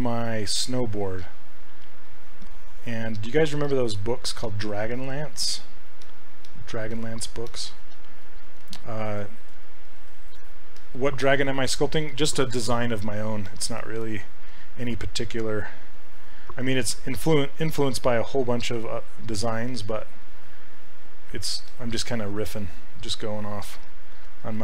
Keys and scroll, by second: 15.4 s, 16.5 s.